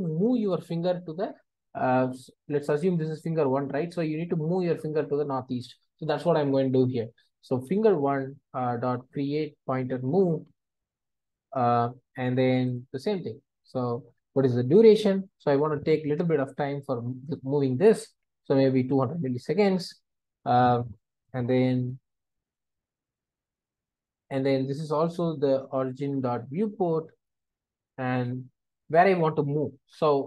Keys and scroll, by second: 8.4 Return, 17.3 Return, 27.3 Return.